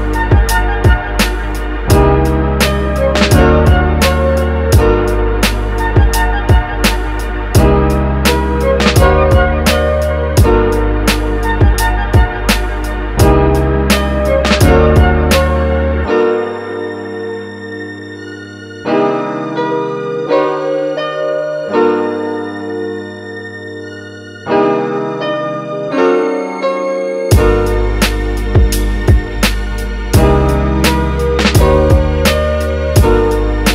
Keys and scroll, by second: 4.8 x, 11.6 x, 20.8 x, 22.3 x, 29.2 super+z, 32.9 f.